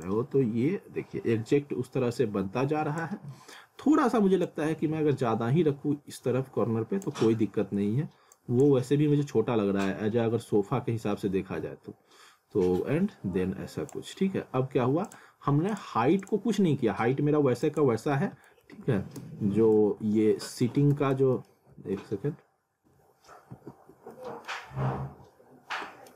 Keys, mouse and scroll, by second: 3.3 middle click, 4.5 click, 7.4 scroll down 1, 8.3 click, 18.7 alt+w, 19.2 z, 20.0 alt+w, 20.9 z, 21.4 alt+middle click, 21.8 alt+w, 23.5 w, 24.5 alt+middle click.